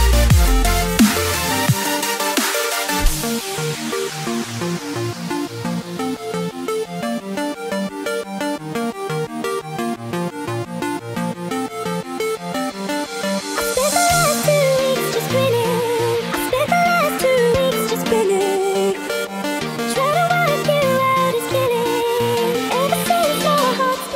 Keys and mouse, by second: 7.6 click, 9.4-13.0 drag, 16.2 click, 17.9-21.2 drag, 22.1 click.